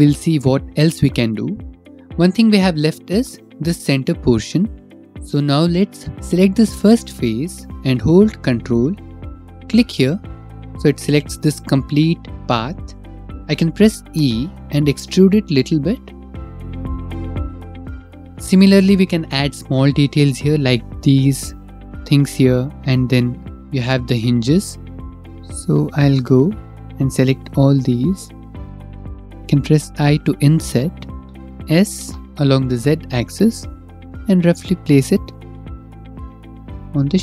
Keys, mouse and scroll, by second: 2.7 middle click, 3.3 click, 5.2 click, 8.7 ctrl+click, 10.2 middle click, 13.4 middle click, 14.0 e, 16.7 Caps_Lock, 16.7 click, 17.7 shift+middle click, 23.8 shift+middle click, 25.2 click, 25.9 middle click, 27.4 shift+middle click, 27.7 middle click, 27.8 middle click, 28.1 shift+middle click, 28.5 click, 28.6 shift+click, 31.2 click, 31.4 Escape, 31.4 click, 31.4 s, 32.1 z, 33.9 click, 33.9 z, 35.8 click, 36.3-36.9 scroll.